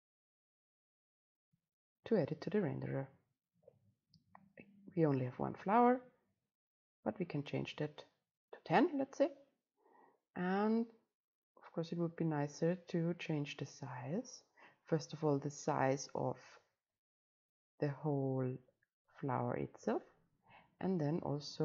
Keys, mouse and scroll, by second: 0.0-4.2 drag, 5.2 click, 5.8 middle click, 6.6-10.4 right drag, 12.9 right click, 19.9-21.4 right drag, 21.4 click.